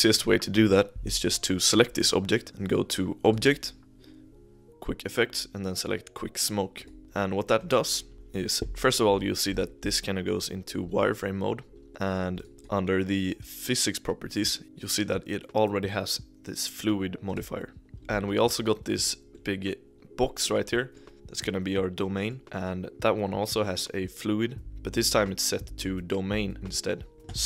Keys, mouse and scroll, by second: 1.1-2.3 scroll up 1, 3.2-6.4 drag, 7.0-8.0 scroll down 2, 8.1 KP_1, 9.1 scroll up 2, 9.5 click, 9.8-10.5 middle drag, 10.5-11.1 scroll down 2, 11.1 z, 11.3-11.7 scroll up 2, 11.7 scroll down 2, 11.9-12.3 middle drag, 12.3 click, 17.2 click, 17.9 scroll down 2, 18.9 click, 19.3-24.2 middle drag, 27.1-27.4 shift+middle drag.